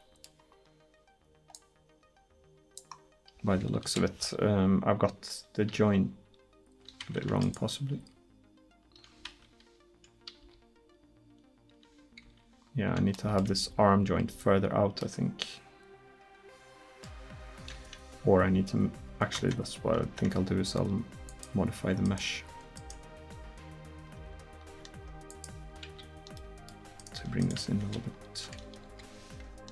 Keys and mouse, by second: 1.6-3.9 drag, 3.9 KP_1, 5.8 r, 7.5-10.4 right drag, 8.0 r, 10.4 r, 12.8-13.3 middle drag, 17.3 middle click, 17.8 Tab, 19.4 Tab, 20.1 Tab, 21.3 click, 22.5 Tab, 22.8 click, 23.4 Tab, 24.1 Tab, 25.9 a, 26.4 middle click, 27.0-28.8 right drag, 28.9 KP_1.